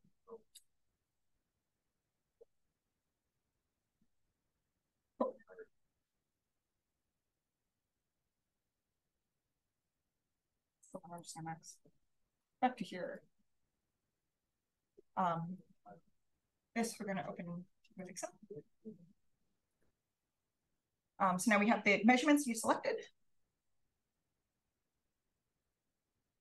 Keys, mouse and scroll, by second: 6.1 click, 11.0 right click, 12.2 click.